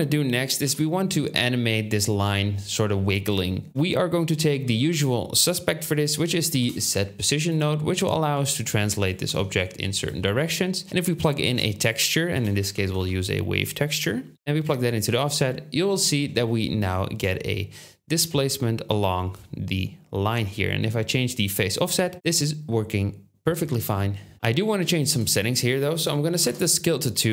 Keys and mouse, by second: 0.5 KP_7, 3.7 shift+a, 8.2-10.1 drag, 9.2 ctrl+z, 10.1 ctrl+z, 11.3 shift+a, 17.5 middle click, 17.6 middle click, 18.2 middle click, 18.4 shift+middle click, 21.0-23.7 shift+drag, 24.3 ctrl+shift+z.